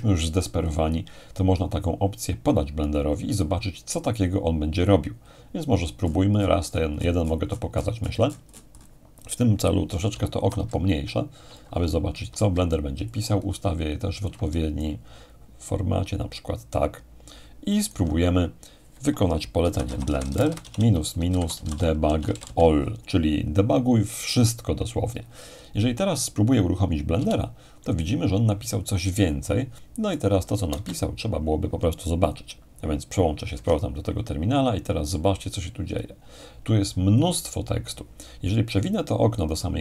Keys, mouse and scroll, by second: 5.3-9.8 scroll down 2, 10.1 ctrl+-, 11.4 ctrl+-, 13.1-18.9 alt+drag, 14.8-18.9 alt+right drag, 19.4-22.9 typing, 27.2 Return, 30.2 alt+click, 30.7 alt+space, 30.8 alt+right click, 32.3-33.3 alt+drag, 33.5 alt+Tab, 35.9-38.6 scroll up 2, 39.4-39.8 drag.